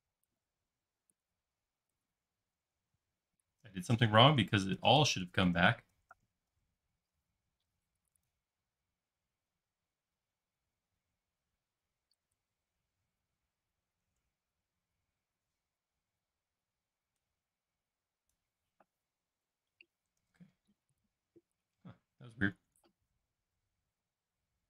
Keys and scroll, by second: 2.8 super+z, 3.6 super+z, 4.0 super+z, 4.2 super+z, 4.4 super+z, 4.7 super+z, 4.9 super+z, 5.1 super+z, 5.4 super+z, 5.9 super+z, 6.1 super+z, 6.5 super+z, 7.1 super+z, 12.7 super+c, 14.1 super+x, 20.3 super+z.